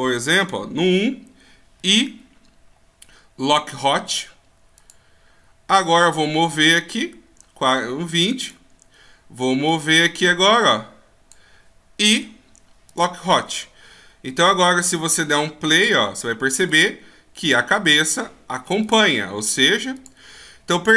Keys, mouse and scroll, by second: 1.9 i, 6.7 click, 9.8 click, 12.2 i, 15.9 click, 16.8 click, 18.9 click, 20.1 click, 20.7 scroll down 1.